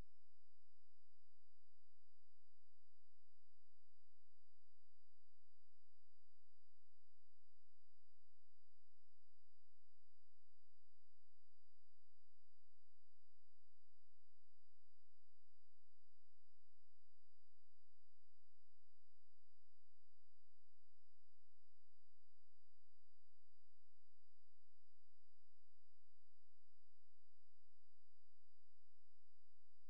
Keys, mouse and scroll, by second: 1.7 [, 4.9-6.3 drag, 5.0 [, 6.3 g, 6.8-8.2 drag, 8.9 ], 13.0 g, 13.6 middle click, 15.1-16.4 middle drag, 18.2-22.5 typing, 23.7-25.5 typing.